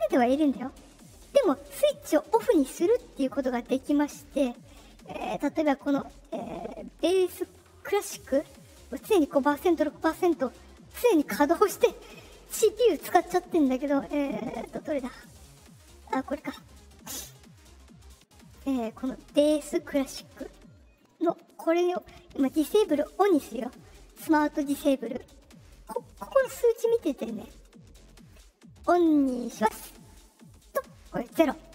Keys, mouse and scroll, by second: 4.2 click, 16.3 click, 18.0-18.5 drag, 21.8 click, 29.5 click.